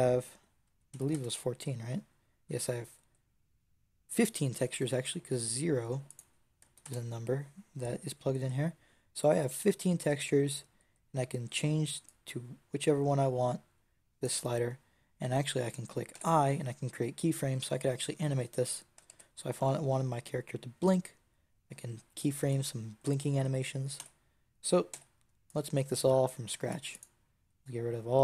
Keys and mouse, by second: 2.4 click, 13.8 middle click, 15.8 middle click, 16.0 i, 19.2 ctrl+z, 23.9 a, 24.8 b, 26.2 click, 26.5 x.